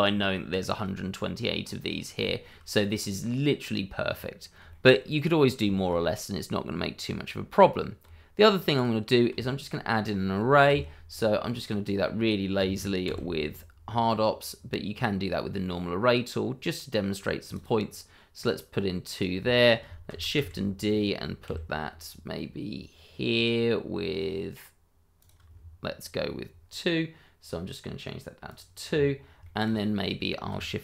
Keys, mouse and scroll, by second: 0.2 scroll down 1, 0.6 shift+middle click, 1.6-1.9 scroll up 1, 2.2 shift+middle click, 2.6-2.9 scroll up 1, 4.0-4.4 scroll down 1, 4.7 shift+middle click, 5.9-7.5 shift+scroll up 2, 8.0 Tab, 8.3 scroll down 1, 8.7 click, 9.1 scroll down 1, 9.4 shift+middle click, 10.7 q, 11.6 click, 13.0 x, 15.2-16.0 scroll up 1, 17.5 click, 17.8 scroll down 1, 18.3 click, 18.7 scroll up 1, 19.1 click, 20.1 shift+d, 21.4 x, 22.0 y, 25.2 click, 27.4 click, 28.9 scroll down 1, 29.4 shift+middle click, 29.7-30.5 scroll up 1.